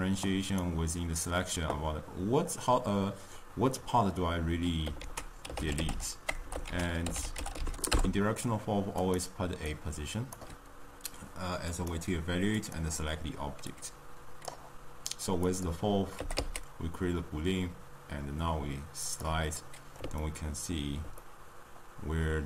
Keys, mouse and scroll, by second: 10.3-11.9 drag, 14.6 click, 15.6 click, 16.2 g, 19.5-22.4 middle drag.